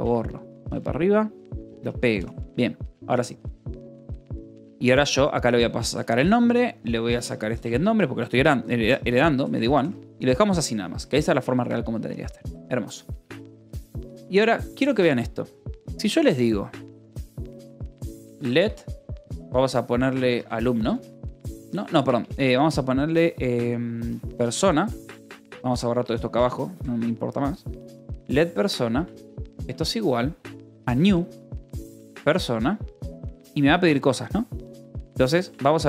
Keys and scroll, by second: 0.5 g, 2.4 j, 4.0 o, 4.2 Escape, 4.4 j, 5.7-9.2 typing, 9.4 Escape, 10.1 ctrl+s, 10.7 j, 15.3 o, 15.5 Return, 17.1-21.5 typing, 23.8 p, 24.2 o, 24.6 Escape, 24.9 j, 25.4 j, 26.5 c, 26.8 Escape, 27.2 k, 28.8 a, 29.1 space, 29.4 =, 29.5 space, 30.6-35.8 typing, 34.9 Escape.